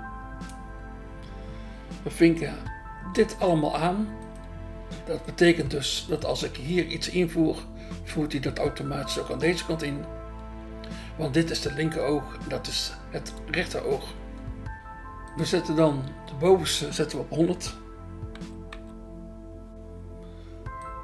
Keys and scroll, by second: 1.2 BackSpace, 10.4 BackSpace, 13.6 BackSpace, 18.7 0.